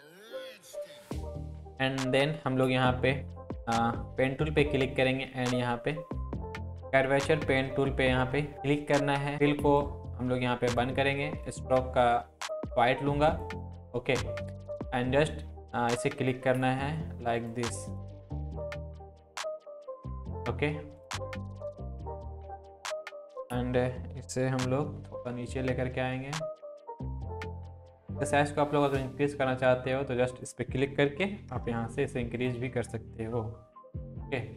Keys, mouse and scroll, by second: 0.3 click, 0.5 Left, 0.7 click, 1.2 Down, 1.2 click, 1.6 click, 4.2-8.5 drag, 16.5 click, 24.7 Down, 28.8-30.7 drag.